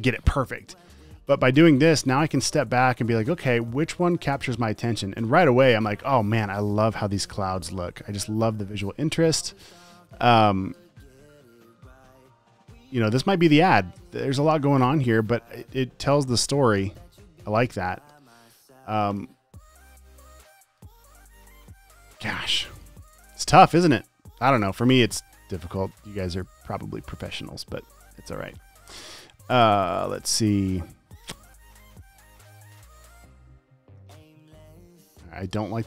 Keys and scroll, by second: 2.0 space, 2.7 space, 3.1 space, 3.6 space, 5.2 space, 6.3 space, 9.9 space, 10.4 space, 11.3 super+space, 13.2 space, 17.0 space, 17.7 space, 18.1 space, 19.5 space, 19.9 space, 20.8 space, 22.1 space, 22.9 space, 24.5 space, 26.2 space, 27.3 space, 34.9 space, 35.4 space.